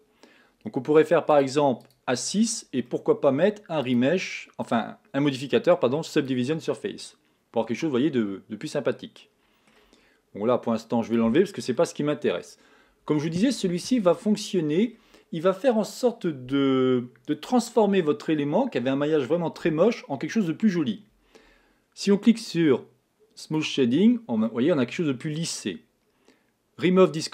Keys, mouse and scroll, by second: 1.7 click, 2.8-3.3 scroll down 4, 3.3 middle click, 3.7-4.3 scroll up 1, 4.3 click, 7.4-10.5 middle drag, 11.4 click, 12.1-17.9 middle drag, 24.2 click, 24.9-27.3 middle drag.